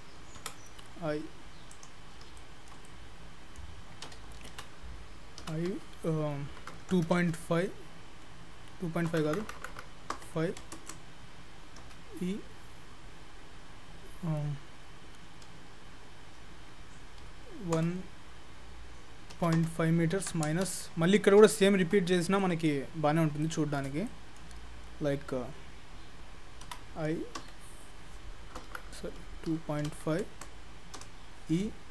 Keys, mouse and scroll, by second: 0.5 i, 2.4 shift+middle click, 2.9 middle click, 4.5 ctrl+z, 5.4 i, 11.8 e, 21.3-21.7 scroll up 3, 21.7 shift+middle click, 21.9-22.5 scroll down 3, 22.5 middle click, 23.0-23.5 scroll up 2, 23.5 middle click, 24.1 shift+middle click, 26.7 i, 31.0 e.